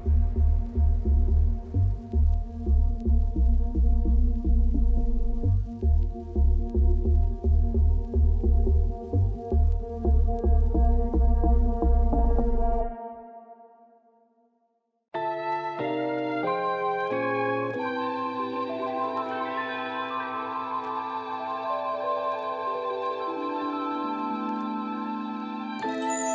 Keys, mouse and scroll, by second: 0.3 KP_7, 0.8 k, 1.9 KP_7, 2.2 Tab, 2.7 alt+r, 3.0 KP_7, 3.4 shift+middle click, 3.6 Tab, 4.3 k, 6.0 alt+click, 6.4 ctrl+x, 6.8 click, 7.0 click, 8.6 z, 8.9 click, 9.3 ctrl+x, 9.9 scroll up 3, 10.4 scroll down 1, 10.8 scroll up 2, 11.1 1, 15.0 click, 15.2 click, 15.7-17.3 middle drag, 17.3-18.1 ctrl+z, 19.5 middle click, 19.8 click, 20.0 click, 20.2 ctrl+x, 21.1 click, 21.3 ctrl+x, 21.6 middle click, 21.7 1, 22.3 KP_7, 22.7 k, 24.2 Tab, 24.6 Tab, 25.2 scroll down 4, 25.4 Tab, 25.6 middle click, 26.0 z.